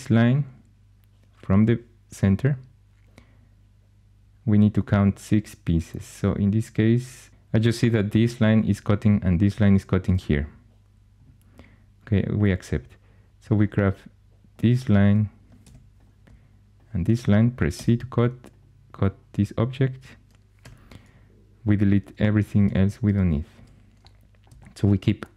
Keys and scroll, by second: 15.5 2, 17.6 c, 20.5 4, 22.4-23.4 typing.